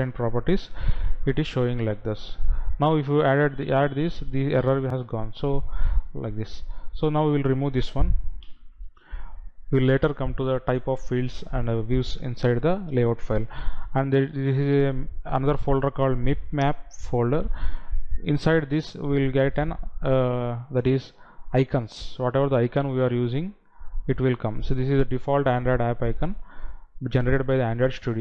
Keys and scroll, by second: 1.3 ctrl+v, 8.9 Delete.